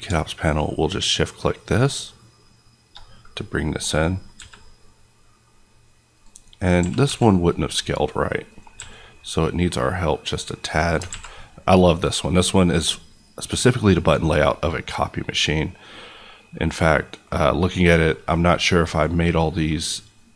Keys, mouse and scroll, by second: 6.1 click, 6.8 g, 7.1 x, 8.5 click, 8.7 s, 10.6 click, 11.0 alt+a, 16.7 middle click, 17.3 scroll up 1, 18.6-20.3 middle drag.